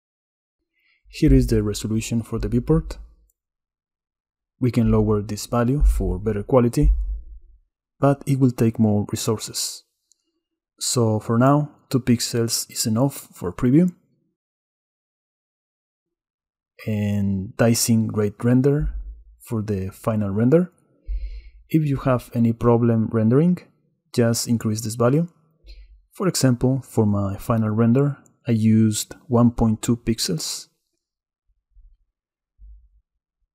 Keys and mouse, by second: 3.6-7.1 drag, 10.7 middle click, 20.4-21.6 drag, 27.9-29.2 middle drag, 29.7 click, 30.2 Tab, 32.2 Tab.